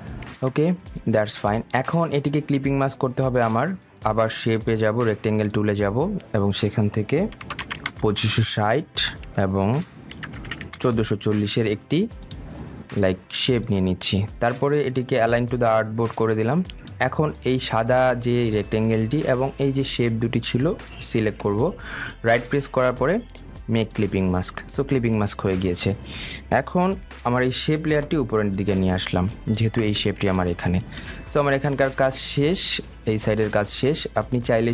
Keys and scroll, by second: 9.6 Tab, 30.5 ctrl+z.